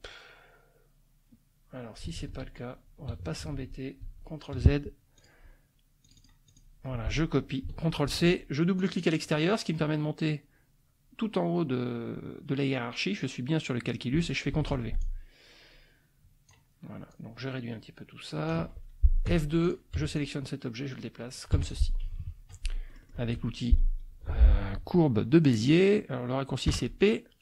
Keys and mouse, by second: 2.2 ctrl+z, 3.5 ctrl+z, 5.2 click, 6.1 click, 8.1 ctrl+c, 8.7 click, 14.5 ctrl+v, 15.0-16.7 ctrl+drag, 17.1-18.6 drag, 19.3 F2, 19.6 click, 19.9 F1, 20.2-21.9 drag, 21.5 F1, 22.1 KP_Subtract, 22.8 click, 26.7 p.